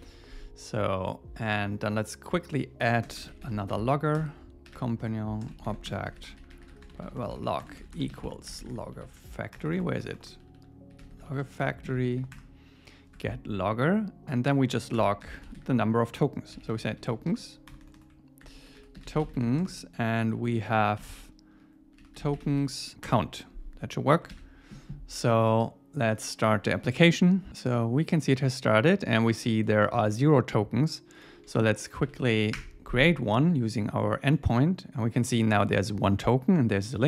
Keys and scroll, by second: 3.0 Return, 5.0 Return, 5.7 alt+8, 5.9 Return, 11.6 Return, 13.2 Tab, 15.0 Return, 21.0 alt+8, 23.0 Return, 24.3 super+s, 32.0 Up, 32.6 Return.